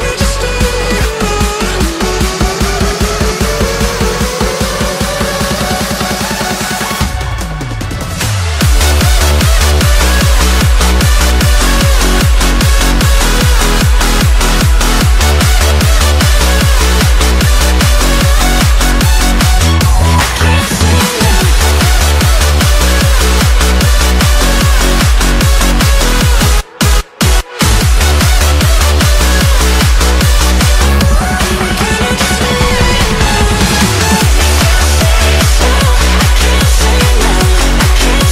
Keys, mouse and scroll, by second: 0.2-0.7 scroll up 1, 0.7-1.7 middle drag, 1.7 scroll up 1, 1.8 scroll down 1, 1.9-2.3 scroll up 1, 2.3 shift+middle click, 2.8-3.4 scroll up 1, 3.4-4.7 middle drag, 4.7 click, 6.2-8.4 drag, 8.6 click, 9.1 middle click, 9.7 scroll down 2, 10.1 g, 13.6 middle click, 14.4 Tab, 14.8-15.8 shift+middle drag, 15.8 Tab, 17.1 click, 17.9 alt+e, 21.2-23.9 middle drag, 23.9-28.3 drag, 29.2 click, 29.6-31.9 right drag, 31.9 ctrl+z, 32.3 Tab, 32.7-33.4 right drag, 33.4-34.2 shift+middle drag, 34.2 Tab, 34.6 shift+middle click, 35.0-35.5 scroll up 2, 35.5 click, 36.6 g, 37.5 g.